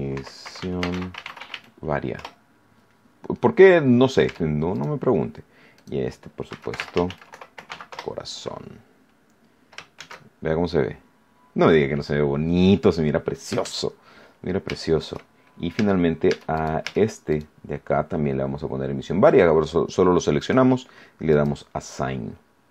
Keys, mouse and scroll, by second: 0.0-1.9 typing, 2.1 Return, 4.7 Tab, 4.7 right click, 5.7 click, 6.2-8.1 typing, 9.9 shift+z, 10.7 middle click, 11.7-12.0 scroll down 1, 13.6 shift+z, 14.4 scroll down 1, 14.8 shift+middle click, 15.2 shift+scroll up 1, 15.5 shift+middle click, 15.7 Tab, 16.5 right click, 17.2 right click, 20.4 click, 21.2 click, 22.0-22.6 scroll down 2.